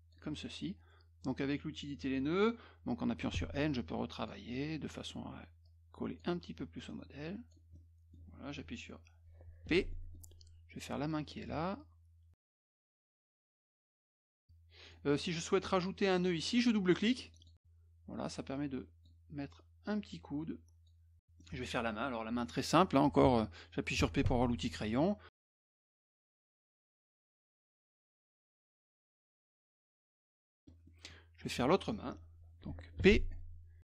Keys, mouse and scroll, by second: 3.8 click, 5.7 click, 6.8 click, 7.7 middle click, 9.9 middle click, 10.9 middle click, 11.8 shift+click, 13.8 click, 14.5 click, 17.3 click, 17.4 click, 18.5 click, 19.9 click, 21.2 middle click, 24.0 p, 24.4 middle click, 25.2 shift+click, 25.9 shift+click, 27.0 shift+click, 28.7 click, 29.8 click, 30.6 middle click, 30.9-32.0 middle drag, 33.0 p.